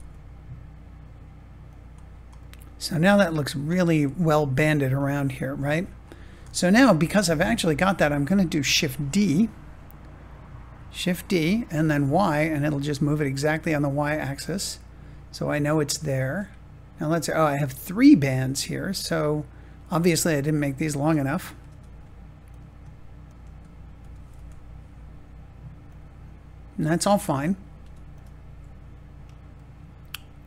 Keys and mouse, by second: 1.6 click, 2.4 middle click, 5.1 Tab, 6.4-7.4 shift+middle drag, 10.7 shift+d, 11.6 y, 15.9-20.7 drag, 21.6 Tab, 22.4 click, 23.9 g, 24.3 y, 25.8-27.3 drag, 27.7 Tab, 29.5 middle click.